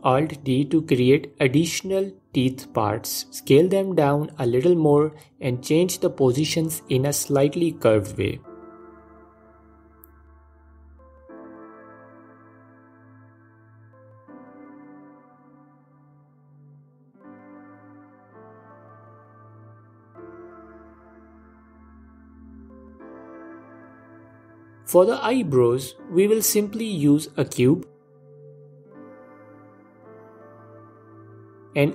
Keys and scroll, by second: 2.1 alt+d, 4.0 s, 6.4 s, 9.9 alt+d, 30.1 shift+a.